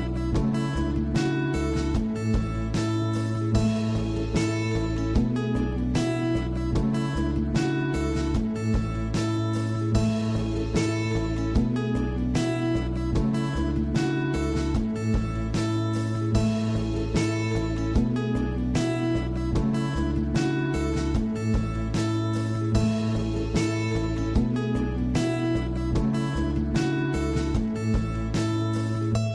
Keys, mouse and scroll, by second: 0.5-0.8 scroll down 4, 0.8-1.2 scroll up 2, 1.2-2.3 shift+middle drag, 2.3-2.8 scroll down 1, 2.8 shift+a, 6.4 click, 7.7-12.1 drag, 12.8-13.5 scroll up 10, 13.5-15.2 middle drag, 15.2 scroll down 2, 15.4-15.9 middle drag, 15.9-16.2 scroll up 5, 16.2 scroll down 4, 16.5-17.3 middle drag, 17.3-17.6 scroll down 1, 17.6-19.7 middle drag, 19.7-21.4 scroll up 3, 21.4 scroll down 3, 21.7 middle click, 22.4 click, 23.1 scroll down 5, 23.4-23.7 middle drag, 23.7 click, 24.0 scroll up 1, 24.2 shift+a, 27.4-29.3 drag.